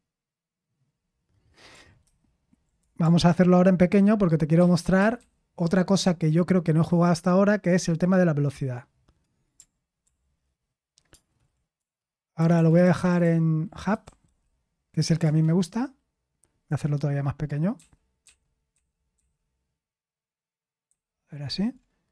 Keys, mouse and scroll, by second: 4.8 ctrl+_, 5.0 ctrl+_, 5.2 ctrl+_, 10.0 ctrl+p, 11.8 ctrl+space, 12.5 ctrl+space, 12.6 BackSpace, 12.9 BackSpace, 14.9 BackSpace, 17.7 typing, 18.2 Return, 19.1 ctrl+_.